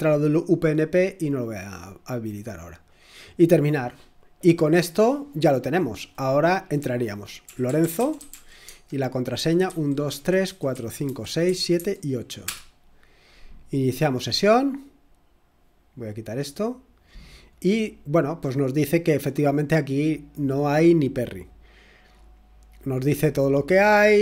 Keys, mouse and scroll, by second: 7.2-11.7 typing, 12.4 Return, 16.7 click, 19.0 click, 21.3 click.